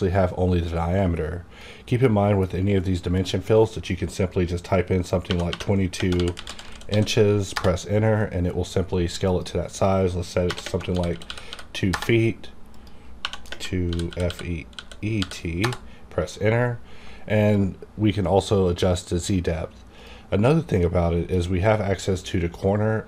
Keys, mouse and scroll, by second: 5.3-6.9 typing, 7.5 Return, 9.3 click, 10.5-11.5 typing, 11.9 Return, 12.7 click, 13.2-15.2 typing, 15.6 Return, 17.5 click, 17.5-22.5 drag.